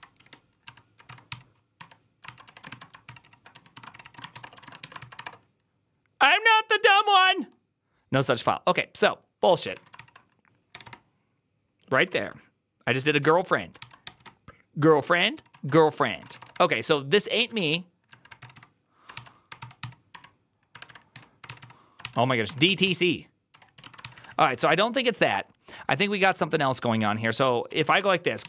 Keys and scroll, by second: 0.0-4.7 typing, 4.9 ctrl+c, 5.0 Up, 5.1 Return, 9.4 ctrl+a, 9.6-11.2 typing, 9.8 ctrl+c, 12.0 ctrl+o, 12.8-14.4 typing, 13.7 ctrl+c, 15.2 ctrl+c, 15.4 ctrl+o, 15.9-25.0 typing, 19.0 ctrl+c, 27.5-28.4 typing.